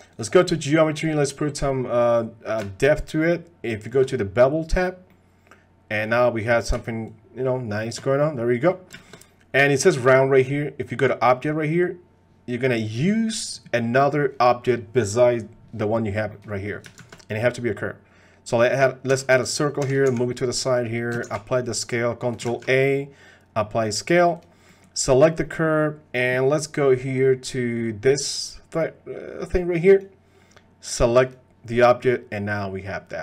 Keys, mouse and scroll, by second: 0.1 click, 2.0-3.9 drag, 5.1-6.0 middle drag, 7.1 shift+click, 8.1-8.7 middle drag, 9.0 shift+click, 12.8 click, 13.8 middle drag, 16.3 middle click, 17.0 shift+a, 19.1 s, 19.8 g, 21.2 ctrl+a, 22.7 ctrl+a, 24.3 click, 24.7 middle click, 25.4 middle click, 29.9 click, 31.7-33.1 drag.